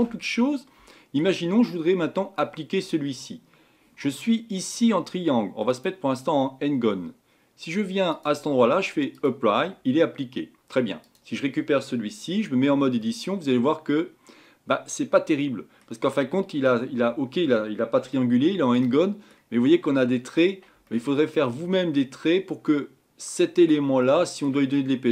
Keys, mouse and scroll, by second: 0.4-2.4 scroll down 1, 5.7 click, 9.2-11.1 drag, 12.6 Tab, 13.0-16.0 middle drag, 18.1-25.1 shift+middle drag.